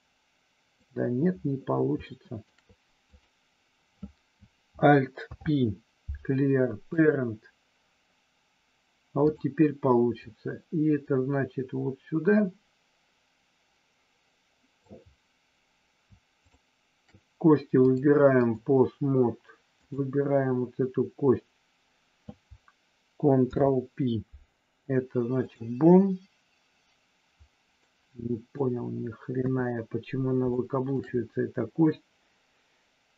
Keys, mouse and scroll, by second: 2.0 shift+middle click, 3.0 click, 5.3 alt+p, 10.1-14.9 drag, 16.4 shift+click, 17.7 click, 19.7 click, 23.4 ctrl+p, 27.9 middle click, 29.4 KP_3, 30.5 middle click.